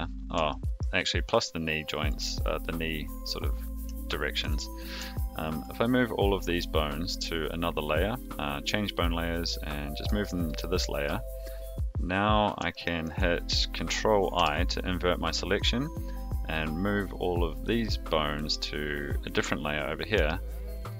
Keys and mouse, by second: 0.4 shift+middle click, 1.6 shift+click, 4.0 shift+middle click, 5.1 shift+middle click, 7.4-11.3 drag, 12.7 shift+middle click, 14.3 ctrl+i, 16.6-20.7 drag.